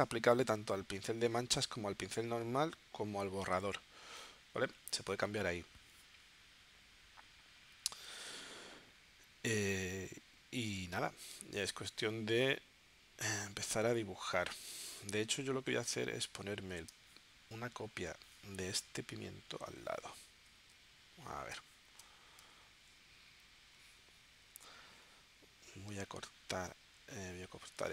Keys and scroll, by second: 15.7 z, 16.9 space, 20.5 z, 21.6 space, 22.4 v.